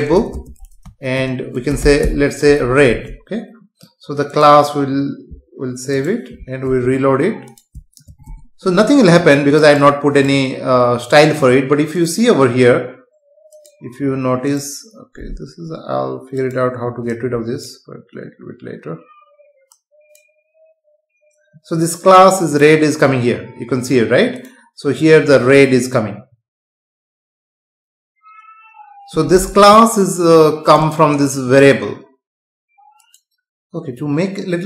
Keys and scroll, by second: 0.3 space, 2.8 ctrl+s, 6.6 F5.